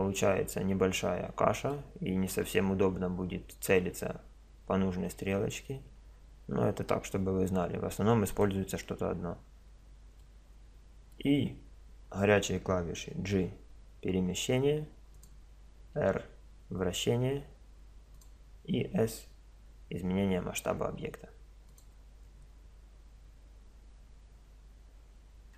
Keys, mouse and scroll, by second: 8.3-10.2 drag, 10.2-10.7 middle drag, 11.9 middle click, 13.3 g, 16.0 r, 18.9 s.